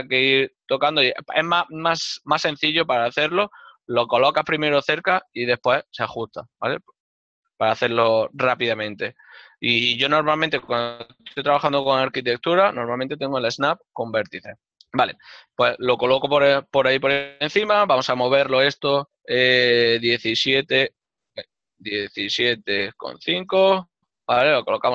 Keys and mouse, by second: 20.4 KP_5, 21.3 BackSpace, 22.1 KP_7.